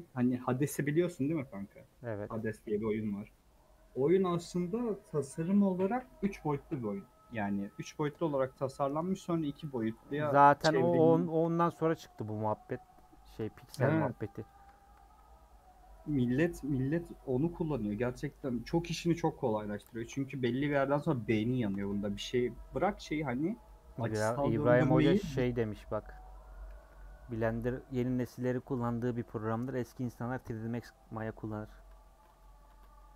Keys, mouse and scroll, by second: 1.7 x, 2.0 middle click, 2.4 a, 3.0 u, 3.5-4.9 middle drag, 4.9 scroll down 1, 5.1-6.6 middle drag, 6.6 scroll up 1, 7.0 2, 7.5 click, 8.1 middle click, 8.8-9.6 scroll down 1, 9.6 ctrl+click, 11.0 middle click, 11.3 a, 12.1 u, 12.6 scroll down 1, 12.8 middle click, 13.5 Tab, 14.4 click, 20.7 /, 21.8 Tab, 22.0 a, 22.9 u, 23.4 Tab, 23.6 middle click, 24.5-26.7 typing, 31.5-32.2 scroll down 10, 32.6 Tab.